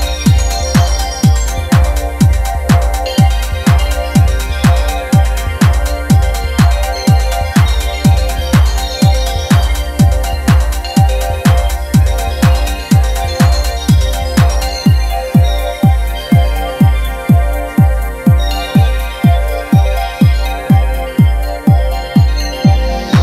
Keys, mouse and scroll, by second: 0.1 scroll down 2, 0.2 shift+middle click, 0.4 scroll up 2, 0.5 shift+middle click, 0.7-1.2 shift+middle drag, 1.2-1.8 drag, 3.1 shift+middle click, 3.6-5.9 drag, 6.4 scroll down 1, 6.5 shift+middle click, 6.7 scroll up 1, 6.8 shift+middle click, 6.8-7.2 scroll down 1, 7.2 shift+middle click, 7.3 scroll up 1, 7.4 shift+middle click, 7.8 click, 9.5 shift+middle click, 9.6-10.0 scroll up 2, 10.0-10.7 drag, 10.9 scroll down 1, 11.0-11.5 shift+middle drag, 11.5 scroll up 3, 11.5 shift+middle click, 12.0-12.6 drag, 12.9 scroll down 3, 13.1 shift+middle click, 13.2 scroll up 1, 13.3 shift+middle click, 13.5 click, 14.8-15.4 drag, 15.8 click, 16.4 ctrl+z, 16.5 ctrl+z, 17.1-17.8 drag, 18.4 scroll down 5, 18.6 shift+middle click, 19.4 scroll up 1, 19.5 shift+middle click, 20.7 click, 20.9 shift+middle click, 21.3 click, 21.3 scroll down 3, 21.4 middle click, 21.6 middle click, 21.8 KP_Decimal.